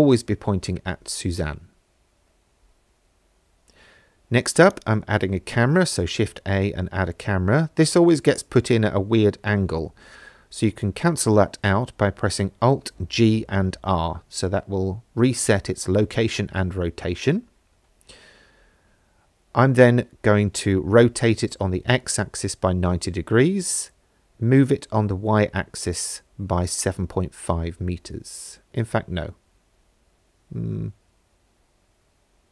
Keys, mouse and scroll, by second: 2.7 shift+a, 6.1 middle click, 11.7 alt+g, 13.3 alt+r, 14.8 middle click, 16.6 r, 17.2 x, 17.6 KP_9, 17.7 KP_0, 18.5 KP_Enter, 19.8 middle click, 21.3-23.2 typing, 22.2 KP_Subtract, 23.9 KP_Enter, 26.0-27.4 typing, 28.7 Escape, 30.1 g.